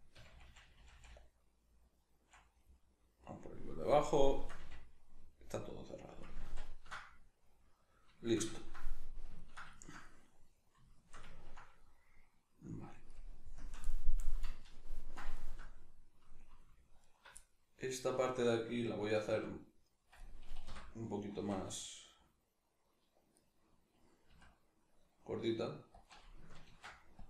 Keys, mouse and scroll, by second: 0.2 f, 2.9-13.0 middle drag, 4.7 f, 6.4 ctrl+z, 13.0 right click, 13.6 KP_Decimal, 13.8-17.0 middle drag, 17.0 alt+right click, 17.4-19.3 middle drag, 19.3 alt+s, 20.3 right click, 20.7 o, 21.3 alt+s, 23.5 right click, 24.3 s, 26.1 click, 26.7 ctrl+r.